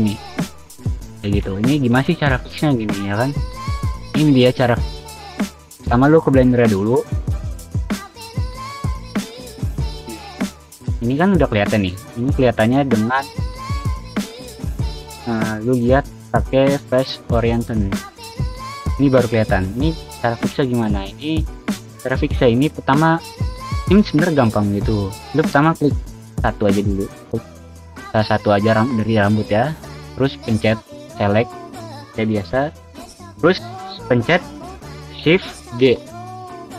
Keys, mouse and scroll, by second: 0.1 v, 3.3 w, 3.9 w, 4.5 s, 4.9 click, 5.3 middle click, 5.4 click, 6.0 click, 6.4 shift+middle click, 6.7 middle click, 7.5 shift+middle drag, 8.0 click, 8.7-9.3 middle drag, 9.9 click, 10.2 click, 11.1 click, 11.8 scroll up 2, 12.3 middle drag, 13.4 click, 14.1 click, 14.7-17.1 middle drag, 17.6 click, 18.0 shift+middle drag, 19.3 click, 19.7 shift+middle drag, 20.1 click, 20.4 Tab, 21.0 3, 21.9 click, 22.6 shift+middle click, 24.0 click, 24.4 click, 24.5 click, 24.7 click, 24.9 click, 25.1 click, 25.4 click, 25.8 click, 26.1 click, 26.2 click, 26.4 click, 27.3 click, 33.7 shift+d, 35.0 click.